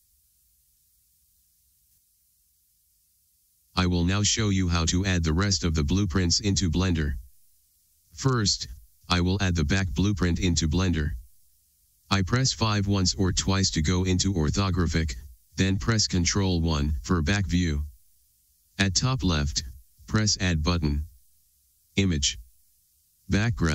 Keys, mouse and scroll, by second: 1.8-17.1 middle drag, 16.8 ctrl+KP_1.